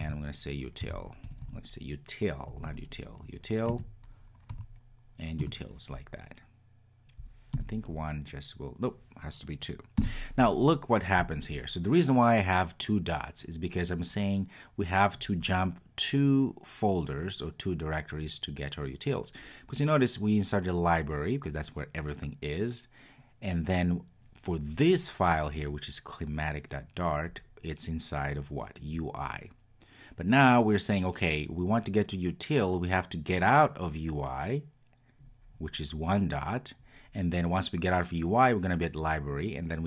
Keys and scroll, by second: 5.4 Return, 9.5 Return.